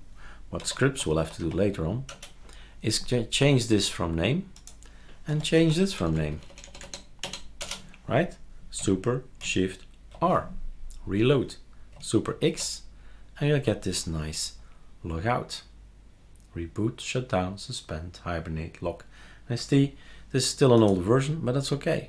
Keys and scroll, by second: 0.3-1.9 typing, 2.1 Return, 5.3 F2, 5.5 Right, 6.0-6.8 typing, 7.6 Return, 10.1 super+r, 12.5 super+x.